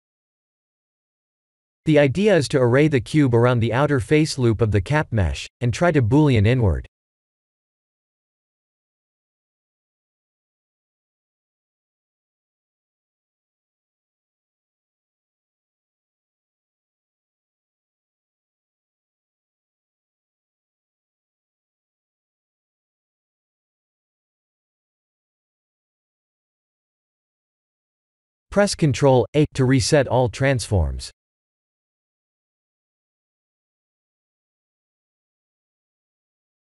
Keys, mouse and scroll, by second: 0.3 click, 1.0 g, 1.2 z, 5.1-5.6 drag, 5.9 alt+middle click, 7.3 KP_7, 8.6 g, 8.9 y, 9.3 x, 15.3 click, 16.2 KP_1, 18.1 KP_1, 18.6 KP_3, 20.8-23.0 typing, 27.9 click, 28.8 ctrl+a, 33.2 click, 34.3-35.2 drag, 36.2 click.